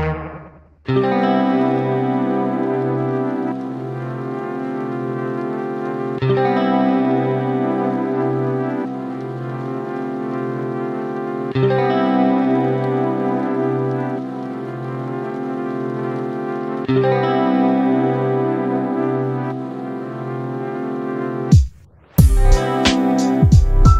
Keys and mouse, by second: 0.7 click, 1.1 click, 1.1 space, 5.8 click, 6.7 click, 8.9 click, 11.3 click, 13.6 click, 16.3-16.9 drag, 17.7 click, 19.0-19.8 drag, 20.2 click, 21.1 click, 22.0 click, 22.9-23.5 drag.